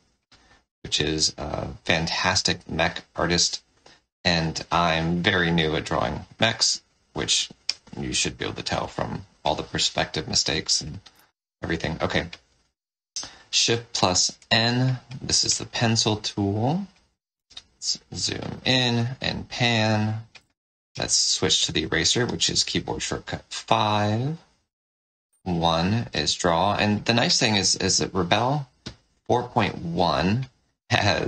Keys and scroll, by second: 3.0 space, 6.0 space, 8.6 space, 11.0 shift+n, 17.4 z, 18.5 space, 20.3 5, 25.2 1.